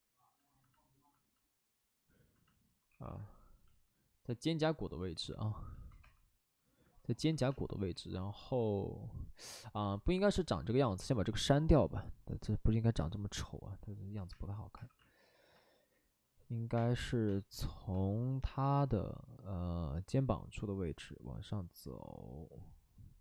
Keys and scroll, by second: 2.8 w, 5.9 2, 7.5 space, 7.7 w, 10.0 alt+s, 10.3 alt+s, 10.8 alt+s, 11.0 alt+s, 14.3 space, 14.7 2, 16.7 space, 17.2 space, 17.9 space, 20.6 space.